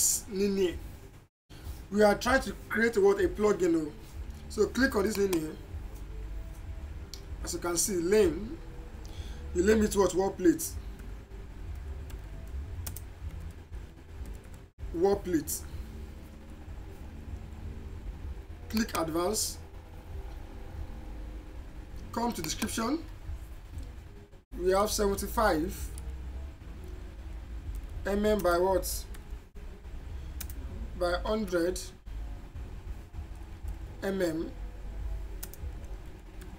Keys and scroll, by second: 6.3 a, 12.1-13.7 typing, 22.5 Return, 24.9 7, 26.0 5, 27.8-29.1 typing, 30.4-32.1 typing, 33.7 m, 35.5 space, 35.7 w, 36.1 a.